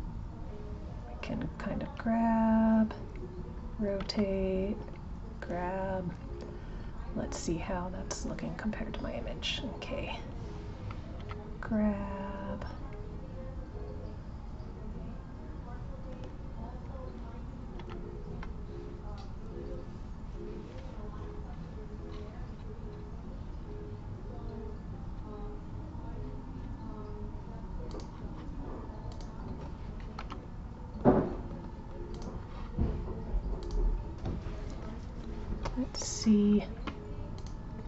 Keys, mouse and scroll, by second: 7.5 click, 16.8 click, 29.1 click, 33.6 click, 37.3 click.